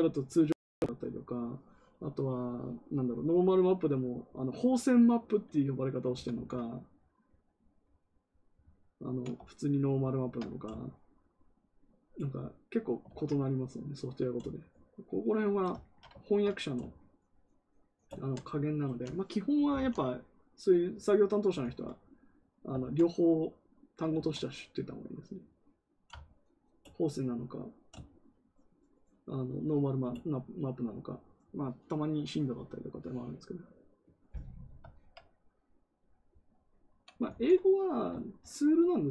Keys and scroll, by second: 6.1 ctrl+z, 6.2 ctrl+z, 13.0 ctrl+z, 19.4-20.2 typing, 21.5 ctrl+z, 22.7 ctrl+z, 24.1 ctrl+z, 37.2 ctrl+z.